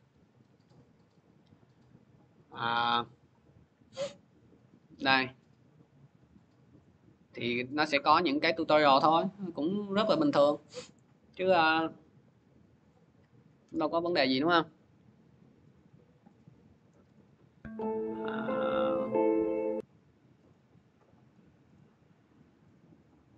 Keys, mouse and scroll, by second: 8.5 scroll down 2, 10.8 click, 11.1 scroll, 12.6 click, 14.2 click, 19.4 click, 21.1 click, 22.2 click.